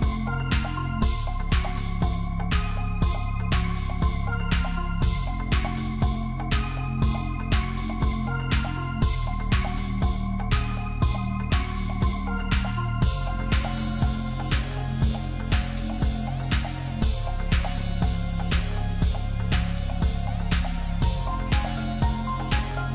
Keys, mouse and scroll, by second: 1.5-2.1 drag, 3.1-4.3 scroll up 1, 4.3 click, 4.9-7.7 middle drag, 7.7-8.2 scroll down 2, 8.2-9.0 middle drag, 9.0-9.8 scroll up 2, 9.8 click, 11.7-14.8 middle drag, 15.3-16.0 scroll down 1, 19.8 scroll up 2, 20.2 click.